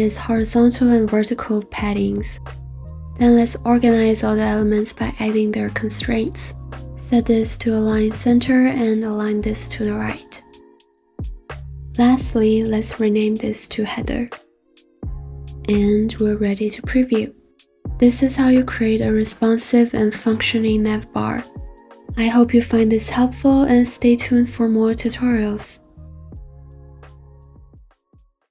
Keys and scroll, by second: 0.2-3.5 typing, 13.5-14.6 typing.